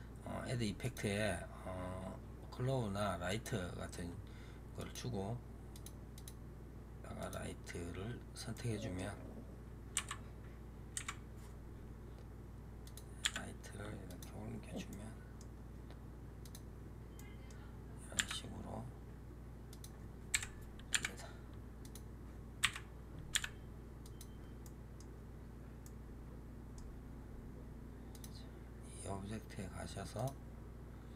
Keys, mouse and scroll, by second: 0.7-3.7 drag, 4.7 click, 6.0-8.4 drag, 8.4-9.8 middle drag, 9.8 KP_3, 10.9 KP_1, 11.6-12.7 scroll down 9, 12.7 click, 13.1 g, 14.4-14.8 scroll up 3, 14.8-15.4 middle drag, 15.4 scroll up 2, 16.4 click, 17.0-17.6 middle drag, 17.6-18.1 scroll up 2, 18.1 g, 20.2 KP_7, 20.8 g, 22.5 KP_1, 23.2 g, 24.5-25.0 middle drag, 25.0 scroll up 2, 25.7-28.0 middle drag, 28.0 click, 30.0 click.